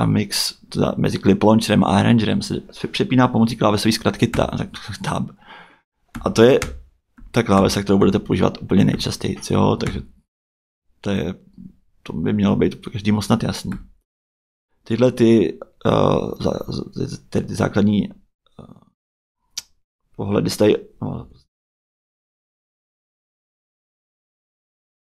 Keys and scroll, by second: 4.3 Tab, 6.1 Tab, 13.7 Tab, 21.1 m.